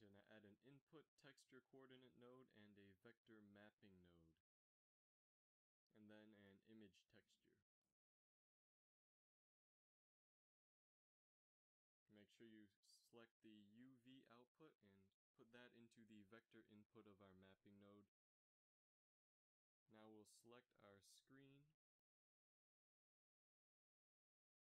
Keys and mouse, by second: 3.7 shift+a, 6.6 shift+a, 9.8 middle click, 11.6-13.8 drag, 14.0-15.7 drag, 16.3 Tab, 16.8 a, 20.8 click, 22.2 ctrl+KP_Add, 22.9 KP_1, 23.8 z, 24.2 click.